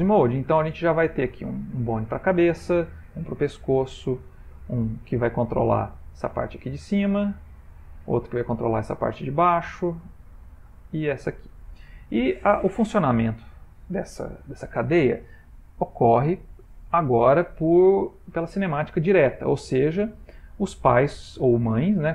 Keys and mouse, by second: 0.2 click, 0.7 r, 2.4 click, 3.0 r, 4.3 click, 4.8 r, 7.6 click, 8.4 r, 10.2 click, 10.7 r, 12.4 ctrl+middle click, 13.3 shift+middle click, 16.3 click, 17.9 ctrl+middle click.